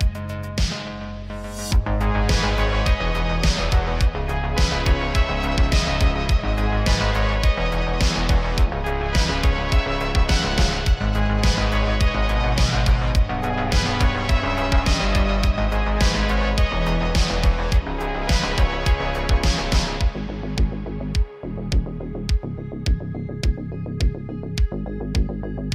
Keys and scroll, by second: 0.1 2, 1.3 shift+s, 1.6 Tab, 3.0 shift+a, 6.8 Tab, 7.2-9.4 typing, 11.7 x, 12.1 a, 14.1 s, 15.4 s, 22.7 g, 22.9 z, 24.9 g, 25.0 z.